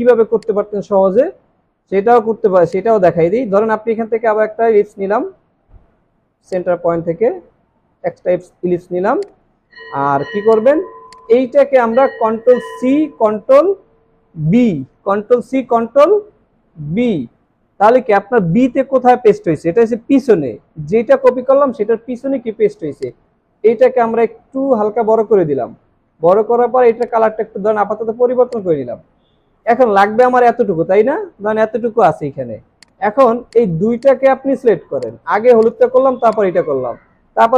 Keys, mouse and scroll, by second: 6.5 alt+shift+click, 12.8 ctrl+c, 13.1 typing, 16.8 ctrl+b, 34.0 double click.